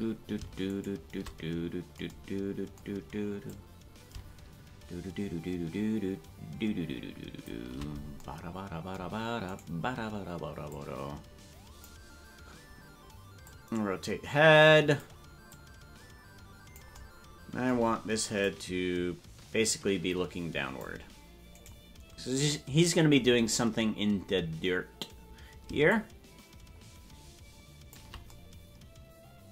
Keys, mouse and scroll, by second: 0.9 shift+right click, 3.4-8.2 drag, 9.7 right click, 10.7-12.4 drag, 13.4-15.0 drag, 15.5-16.8 drag, 18.4-20.9 drag, 21.8 right click, 25.9-28.4 shift+drag.